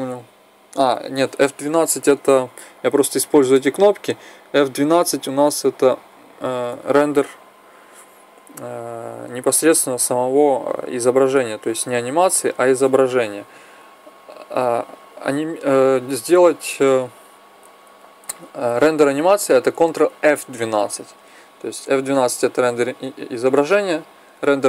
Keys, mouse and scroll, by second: 14.3 Escape, 15.5-17.3 drag.